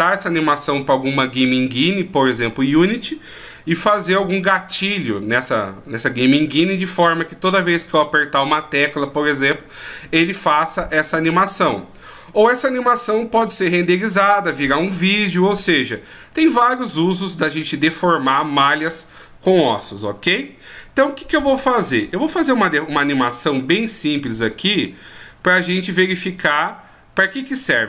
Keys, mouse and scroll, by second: 23.8 click.